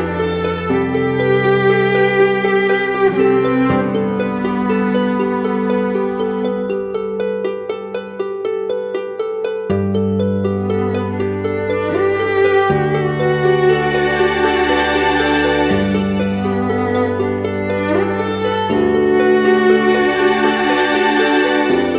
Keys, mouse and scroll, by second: 3.6 ctrl+=, 5.6 typing, 7.1 double click, 10.8-11.1 typing, 13.0 ctrl+-.